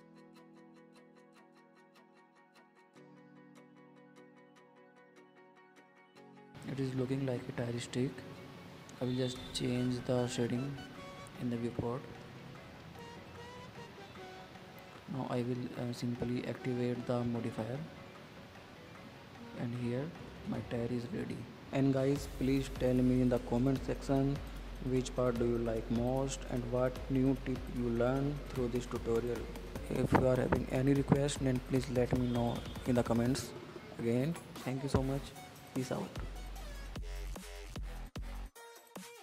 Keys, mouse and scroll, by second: 1.7 middle click, 2.0 scroll down 2, 2.2-3.5 middle drag, 3.5 Tab, 4.1 click, 4.3-5.0 middle drag, 5.0-5.8 drag, 6.0-7.3 middle drag, 7.3 scroll down 2, 7.5 middle click, 8.0 scroll up 3, 8.2-8.6 middle drag, 8.6 scroll up 1, 8.8-9.6 middle drag, 9.6 scroll down 3, 9.8 middle click, 11.7 click, 13.0 click, 13.2 middle click, 13.4 scroll up 4, 13.7 middle click, 14.6-15.0 scroll down 7, 15.0 middle drag, 15.2 click, 15.6 middle drag, 15.9-16.3 scroll up 5, 16.3-17.5 middle drag, 17.5 scroll down 3, 17.7-18.4 middle drag, 18.4 scroll down 1, 18.6 middle click, 19.5 click, 20.9 click, 21.5 KP_Decimal, 22.0 scroll up 4, 22.2-23.6 middle drag, 23.6 scroll down 3, 23.7 middle click, 23.9 click, 24.1-24.6 scroll up 2, 24.6-25.2 middle drag, 25.2 scroll down 3, 25.4-25.7 middle drag, 25.7-26.1 scroll up 3, 26.1-26.9 middle drag, 26.9-27.2 scroll down 3, 27.2-28.0 middle drag, 28.0-28.6 scroll up 2, 28.6 shift+middle click, 29.1-30.3 drag, 30.5-31.3 middle drag, 31.3 click, 32.0-33.5 drag, 35.2 click, 35.7-37.7 drag, 37.8 scroll down 3, 38.0 middle drag, 38.2 scroll up 2, 38.4-39.2 middle drag.